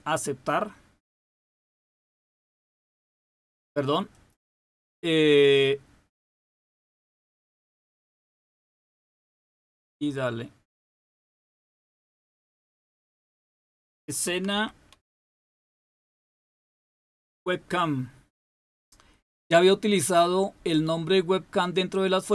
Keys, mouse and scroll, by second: 1.3 click, 4.0-7.0 drag, 7.0-9.1 typing, 11.0-16.9 typing.